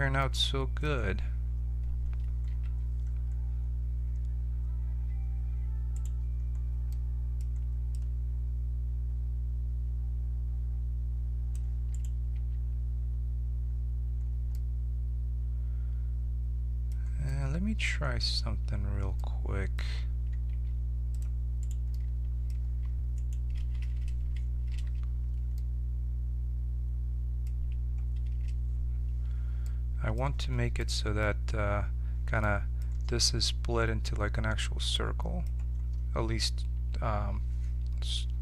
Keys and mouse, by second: 2.4 n, 5.6 middle click, 5.9-8.2 right drag, 7.9-11.5 drag, 11.9-13.6 right drag, 12.3 Tab, 13.6-14.9 middle drag, 20.4 ctrl+Tab, 21.9 click, 22.1-23.7 right drag, 24.7 f, 32.8-35.1 middle drag, 35.4-38.4 right drag.